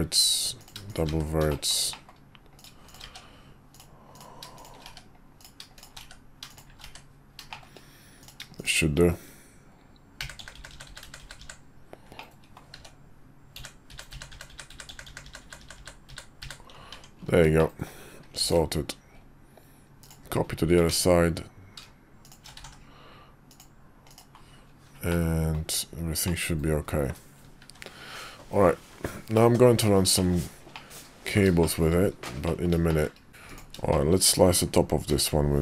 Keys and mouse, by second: 0.6 click, 0.9 shift+click, 1.5 shift+middle click, 1.9 middle click, 2.5 click, 2.8 shift+click, 3.7 click, 4.9 1, 5.4 click, 6.0 1, 7.4 shift+1, 7.5 middle click, 8.2 click, 8.6 click, 10.2-11.4 typing, 12.1 middle click, 12.7-16.4 typing, 16.9 Tab, 17.5 middle click, 18.4 alt+x, 20.0 click, 20.9 ctrl+z, 22.6 alt+x, 23.5-23.9 drag, 24.1 click, 25.1-25.5 middle drag, 26.2-27.1 middle drag, 28.8 KP_5, 29.4-30.0 middle drag, 30.2 middle click, 30.7-31.3 middle drag, 31.6 shift+middle drag, 32.4 middle click, 32.9 shift+middle click, 33.3 `, 33.9 shift+middle click, 35.1 d.